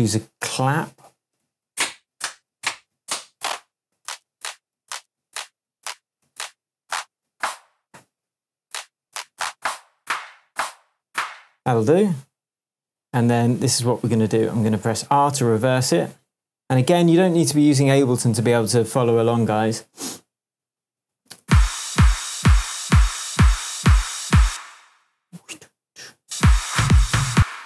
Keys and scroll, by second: 1.4 Right, 1.6 Down, 4.7 Up, 5.2 Down, 6.2 Up, 7.2 Down, 9.0 Down, 10.4 Up, 11.0 Down, 15.3 r, 21.4 space, 24.4 space, 26.2 space.